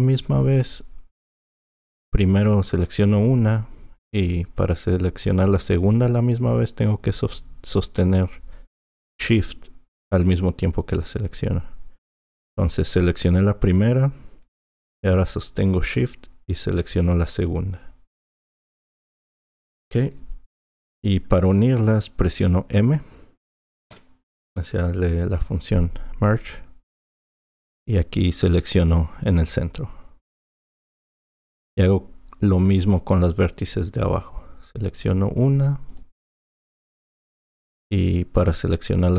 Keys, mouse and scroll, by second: 3.0 click, 18.3 shift+click, 23.9 m, 35.0 click, 35.9 click.